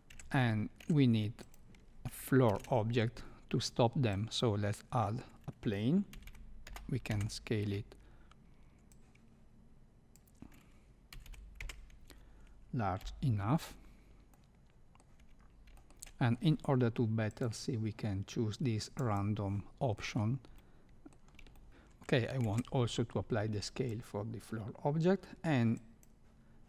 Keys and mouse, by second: 0.1 Tab, 0.8 Tab, 1.4 click, 2.4 shift+a, 6.1 s, 8.9-10.1 drag, 11.1 s, 12.9 KP_7, 14.3-15.0 middle drag, 16.1 middle click, 17.4-19.6 drag, 20.5-21.1 middle drag, 21.5 shift+middle click, 22.4 ctrl+a, 25.8 click.